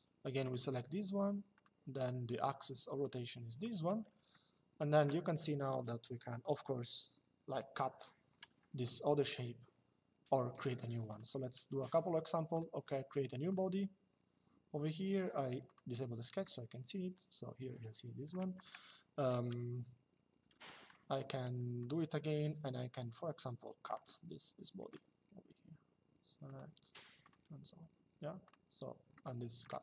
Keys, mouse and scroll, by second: 0.1 click, 1.2 click, 2.8 click, 4.0 shift+middle click, 8.5 shift+middle click, 10.8 click, 12.2 click, 15.4 click, 21.5 click, 23.6 click, 26.2 click, 28.2 click, 28.8 shift+middle click.